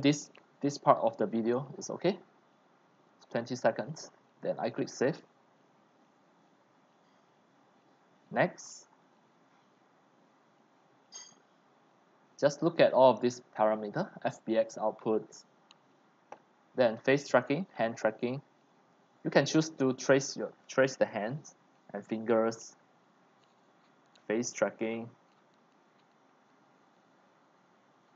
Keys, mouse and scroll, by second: 4.8-7.3 drag, 7.3-8.2 scroll down 1, 8.2-10.7 scroll down 11, 8.3 middle click, 8.5-9.7 middle drag, 9.9 middle click, 10.7-11.2 scroll up 4, 11.3 click, 13.5 scroll, 13.8-15.9 scroll down 5, 22.6 click, 23.3-25.7 drag.